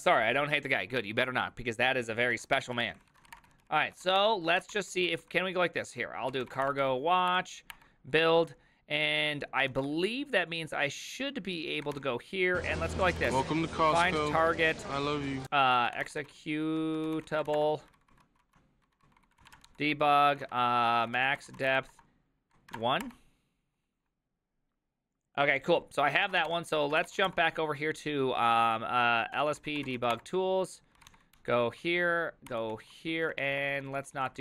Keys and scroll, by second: 2.6-4.7 typing, 5.1 ctrl+c, 6.0-7.7 typing, 7.7 Return, 9.7 ctrl+a, 11.7-23.5 typing, 20.3 ctrl+Right, 20.5 Left, 26.9 ctrl+a, 26.9 l, 27.1 l, 27.3 ctrl+f, 29.1-31.6 typing, 32.5 ctrl+n, 32.7 ctrl+s, 33.3-34.4 typing.